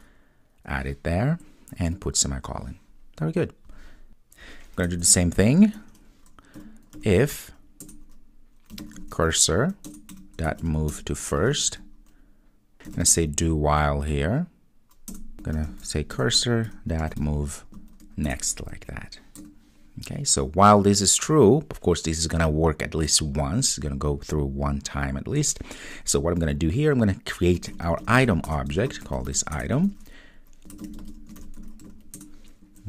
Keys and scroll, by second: 7.8 Return, 13.5 Return, 16.1 Return, 18.3 Return, 28.5 Return, 32.2 Return.